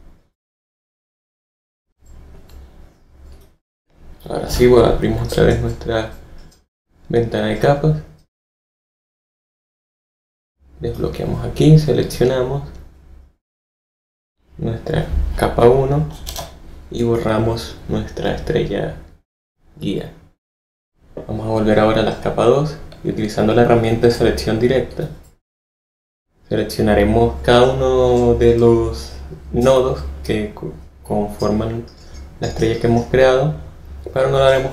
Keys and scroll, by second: 4.4 F7, 16.2 BackSpace.